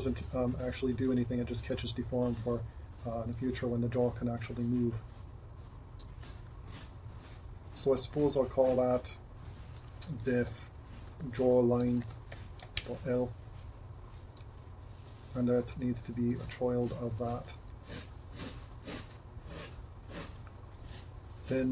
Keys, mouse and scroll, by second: 0.4 r, 9.7-14.5 drag, 15.1 Tab, 15.7 Tab, 17.5 super+p, 18.8 Tab.